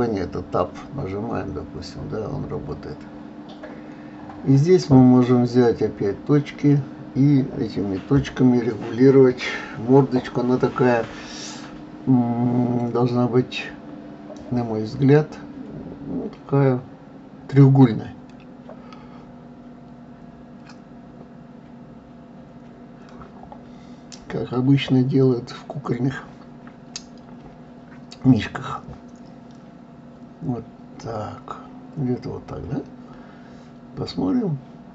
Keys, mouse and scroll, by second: 0.2-1.8 drag, 1.8-3.6 middle drag, 3.6 click, 6.0 click, 7.1-8.9 drag, 11.5 click, 13.5 g, 17.3 click, 20.3 g, 33.2-34.9 middle drag.